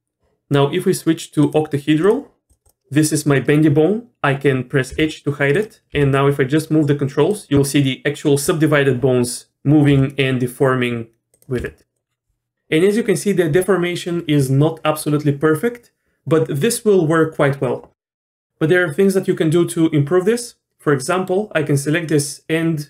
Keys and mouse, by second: 1.4-2.1 middle drag, 2.1 click, 2.6 click, 4.9 h, 5.9 g, 9.5 g, 9.9 g, 11.6 r, 21.2 middle click.